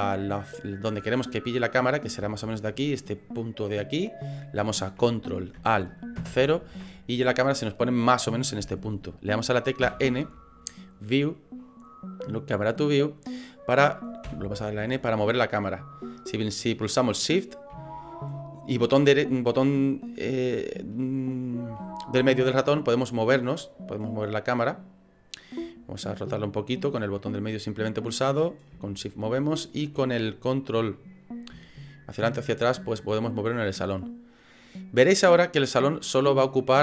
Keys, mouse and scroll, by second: 0.4 middle click, 2.3 shift+middle click, 6.2 ctrl+alt+KP_0, 10.0 n, 11.3 click, 12.9 click, 14.4 n, 22.7 shift+middle click, 27.0 middle click, 28.5 middle click, 29.0 shift+middle click.